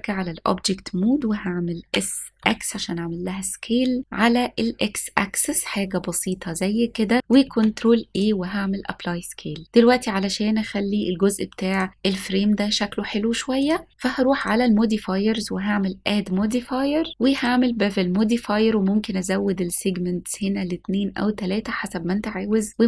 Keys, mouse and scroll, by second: 1.9 s, 2.4 x, 6.2 click, 7.5 ctrl+a, 11.8 click, 13.7 click, 14.4 click, 15.4-17.7 drag, 19.7-22.8 drag.